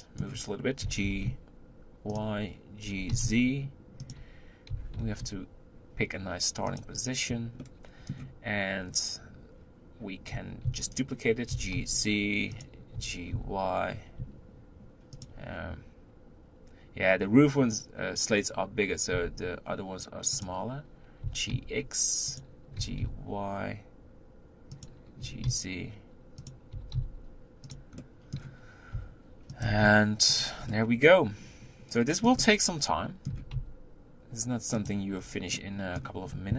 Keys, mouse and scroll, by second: 0.8 g, 2.9 g, 7.7-10.7 middle drag, 10.7 shift+d, 11.6 g, 13.0 g, 19.2 s, 22.9 g, 25.2 g, 28.0 middle click, 29.0 r, 29.6 g, 30.7-33.3 middle drag, 33.3 r, 35.2-35.6 scroll down 2, 35.6-36.5 middle drag.